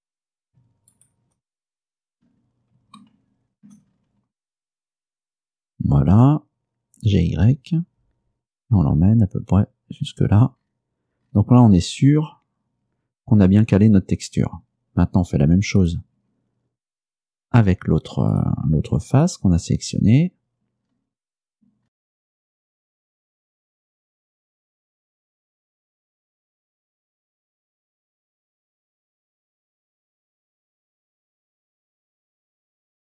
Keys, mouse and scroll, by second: 0.0-0.3 scroll down 1, 1.0 shift+right click, 1.8-2.6 shift+scroll up 5, 3.1 shift+middle click, 4.0-5.0 shift+scroll up 5, 6.2 g, 7.2 y, 10.2 click, 10.7-11.0 scroll down 2, 11.3-11.7 scroll down 2, 11.9-12.2 scroll down 2, 15.9 right click, 18.4 right click, 19.3 shift+right click, 20.3-20.8 scroll up 1, 20.9-21.9 scroll up 4, 21.8-23.1 typing, 22.3 click, 22.3 scroll down 2, 22.6 right click, 22.6 shift+right click, 22.7 shift+scroll up 5, 22.8 shift+middle click, 23.3 click, 25.3 scroll down 2, 25.4-25.8 scroll up 4, 25.5 shift+middle click, 25.7 shift+middle click, 26.0 g, 26.5 click, 26.5 scroll down 1, 26.7 right click, 26.8 shift+middle click, 26.9 scroll up 4, 26.9 shift+middle click, 27.1 middle click, 27.2 shift+middle click, 27.4-30.0 typing, 27.4 shift+middle click, 27.9 click, 28.0 scroll down 2, 28.1 shift+middle click, 28.2 shift+scroll up 5, 28.4 shift+middle click, 28.5 shift+middle click, 28.8 scroll down 2, 28.9 right click, 29.1 shift+right click, 29.1 shift+scroll up 2, 29.3 shift+middle click, 29.7 click, 32.7 scroll down 2, 32.9 scroll up 2, 33.0 scroll down 2.